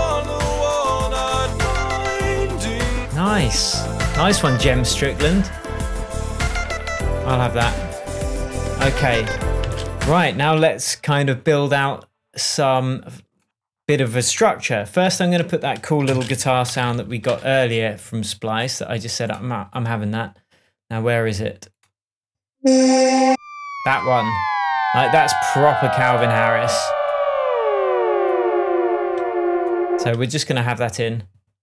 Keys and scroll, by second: 9.3 Tab, 10.0 space, 15.5 super+t, 16.4 alt+super+t, 16.5 alt+super+space, 16.6-17.7 typing.